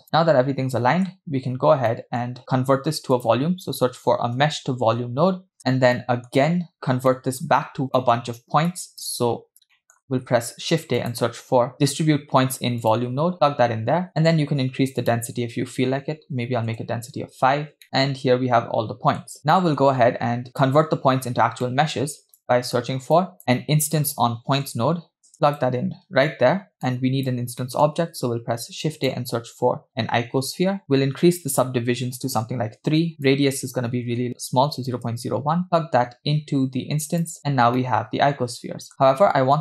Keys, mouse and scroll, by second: 0.1-1.2 middle drag, 1.9 middle click, 2.4 shift+a, 6.0 middle click, 7.1 middle click, 7.8 scroll down 2, 8.0 middle click, 8.7-9.1 drag, 9.8 middle click, 10.1 shift+a, 14.1-15.0 scroll up 5, 15.1-17.1 drag, 17.8-19.3 middle drag, 19.4 scroll down 5, 19.6 middle click, 20.5 click, 21.7 middle click, 22.5-22.9 drag, 23.2 click, 23.4 middle click, 23.4 shift+a, 26.9 click, 27.7 shift+middle click, 28.1 shift+a, 30.8-31.6 scroll up 6, 31.6 click, 33.2-35.5 drag, 35.6-37.4 drag, 37.5-37.8 scroll up 2, 37.8-39.6 middle drag, 38.9-39.2 scroll up 1.